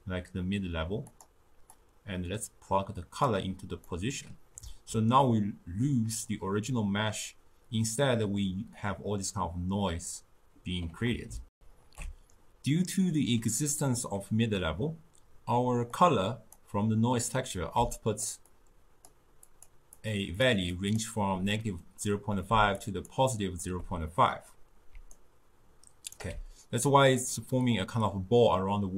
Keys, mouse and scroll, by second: 11.6 ctrl+alt+shift+q, 16.0-17.8 drag, 17.8-21.3 typing, 18.0 click, 18.6 click, 19.5 click, 20.0 click, 20.7 click, 22.5-24.9 typing, 22.8 drag, 23.4 click, 25.2-26.2 right drag, 26.2 d, 26.3 d.